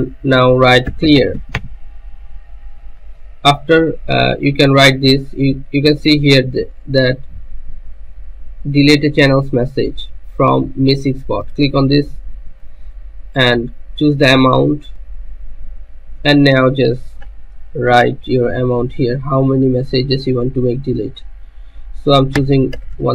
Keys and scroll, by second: 0.9-2.0 typing, 22.3-23.1 typing.